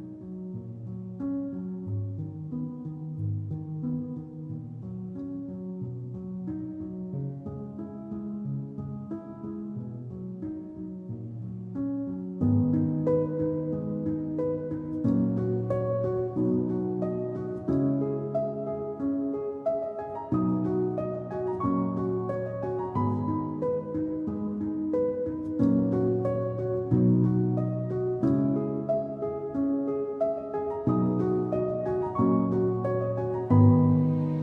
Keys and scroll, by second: 2.1 alt+space, 4.4 alt+space, 5.2 space, 8.3 space, 9.3 space, 12.5 alt+space, 15.4 `, 16.3 ctrl+j, 19.5 alt+space, 22.0 ctrl+i, 23.8 alt+x.